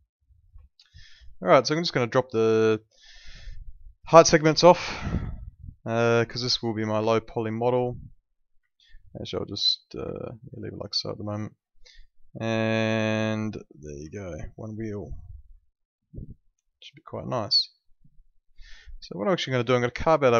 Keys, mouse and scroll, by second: 0.6 alt+middle click, 4.7 click, 5.3 alt+middle click, 7.1 alt+middle click, 8.7 alt+middle click, 10.1 alt+middle click, 11.4 alt+middle click, 12.1 alt+middle click, 13.0 click, 14.1 alt+middle click, 15.6 alt+middle click, 19.5 middle click.